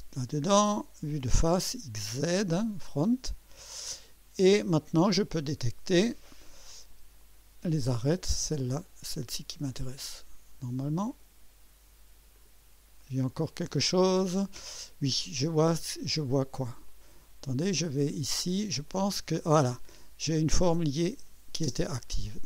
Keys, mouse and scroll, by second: 0.4 click, 3.8 click, 4.6-5.1 scroll up 2, 5.1-5.8 right drag, 5.1 middle click, 7.2 click, 9.7 click, 11.1 click, 12.3 click, 13.3 click, 15.2 click, 16.1 click, 16.9 click, 18.8 click, 20.5 click, 21.7 space.